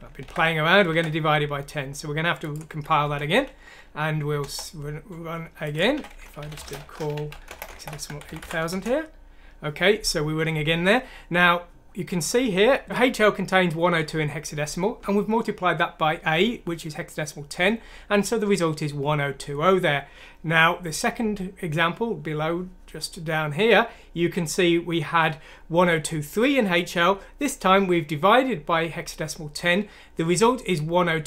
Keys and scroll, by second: 0.9 alt+Tab, 3.0 F9, 4.4 Return, 5.8-8.4 typing, 8.7 Return.